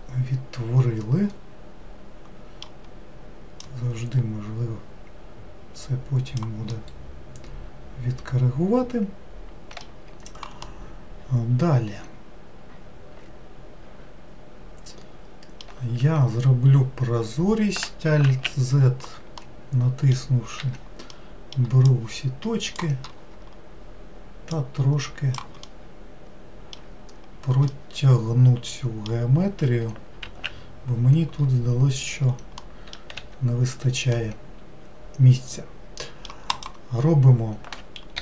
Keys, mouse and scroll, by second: 0.0-2.9 middle drag, 3.7-4.7 drag, 6.8-9.8 middle drag, 10.7-13.8 middle drag, 18.3 alt+z, 19.4-20.6 middle drag, 20.6 1, 21.1 middle click, 21.9 click, 24.5 click, 25.7-30.3 middle drag, 30.3 alt+z, 32.7 middle click, 33.2 3, 34.2-36.6 middle drag, 36.6 click.